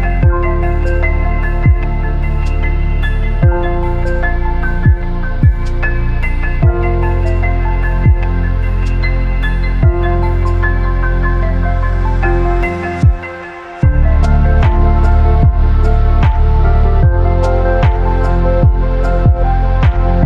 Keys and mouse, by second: 1.4 z, 6.5-6.9 shift+drag, 8.4 r, 8.5 r, 10.1-11.2 drag, 14.4 click, 15.6 click, 17.2 click, 18.3 click, 19.8-20.2 drag.